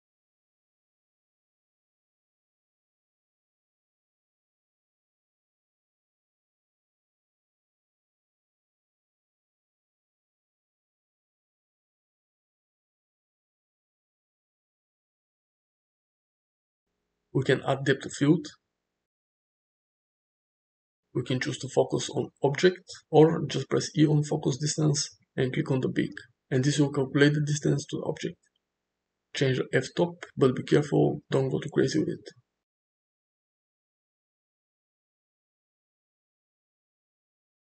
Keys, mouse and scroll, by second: 0.0-2.8 typing, 0.1 click, 0.9 click, 4.6 click, 5.0-6.8 typing, 7.4 click, 7.9 ctrl+z, 7.9 click, 9.4 click, 9.9 click, 10.0 g, 10.4 g, 10.9 click, 11.6 click, 11.8 KP_3, 12.1 click, 12.4 s, 13.2 shift+`, 15.1 shift+middle click, 18.6 click, 23.7 e, 28.1 click, 31.0 space, 32.2-33.5 drag, 34.4-36.6 drag.